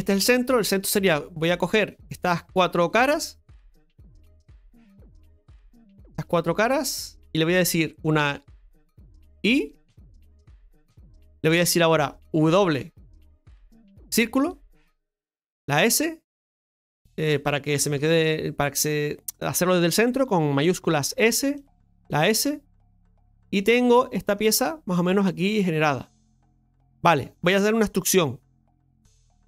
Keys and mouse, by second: 0.6 right click, 2.2 right click, 3.0 click, 3.7 right click, 4.0 shift+right click, 5.9 right click, 6.1 shift+right click, 6.5 shift+right click, 6.8 shift+right click, 7.7 middle click, 10.1 i, 11.5-13.7 middle drag, 13.7 w, 21.1 shift+s, 22.7 s, 23.1-24.3 middle drag, 25.3-26.7 middle drag, 27.0 middle click.